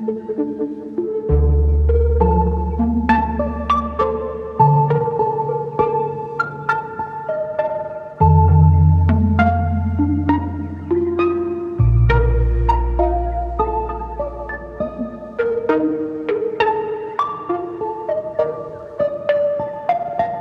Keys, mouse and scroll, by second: 3.7 r, 10.6 s.